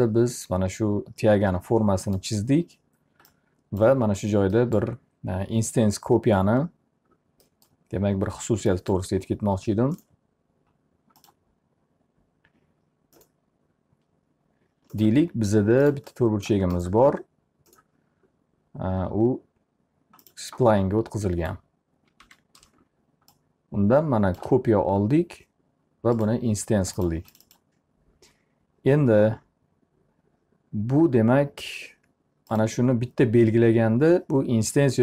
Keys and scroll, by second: 21.8 w.